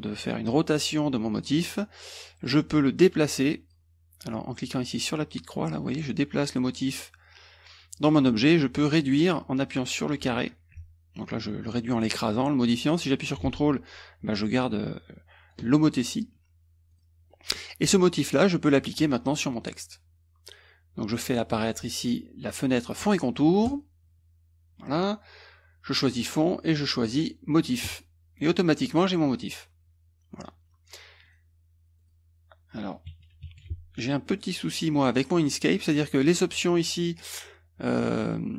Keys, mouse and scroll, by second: 2.9 click, 5.2-8.3 drag, 9.2-15.7 drag, 16.9 click, 17.3 click, 17.9 click, 18.6 click, 23.7 click, 27.9 click, 31.3 click, 32.0 click, 33.3 KP_Subtract, 34.3 click, 34.8-36.1 drag, 37.2-38.5 drag.